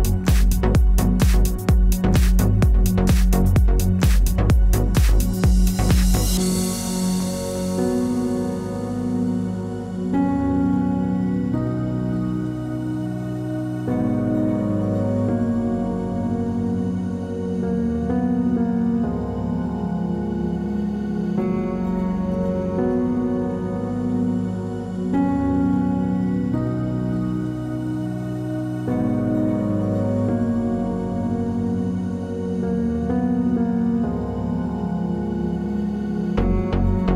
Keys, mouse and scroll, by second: 0.5 scroll down 2, 1.0 click, 1.7 middle click, 2.0 scroll down 1, 2.4 shift+a, 3.7 d, 4.3 s, 5.3-6.1 scroll down 2, 5.7 s, 6.2 middle click, 6.6 scroll down 2, 7.2 shift+a, 11.0 click, 13.0 click, 16.0 click, 16.8 ctrl+z, 16.8 click, 17.5 click, 18.4 s, 20.2 click, 21.5 s, 22.2 shift+a, 23.8 click, 25.4 click, 26.4 click, 27.6 click, 28.6 s, 29.9 click, 30.8 click, 33.0 click, 34.1 s, 35.3 middle click, 35.8-36.1 scroll up 7, 36.2 shift+middle click, 36.9 click.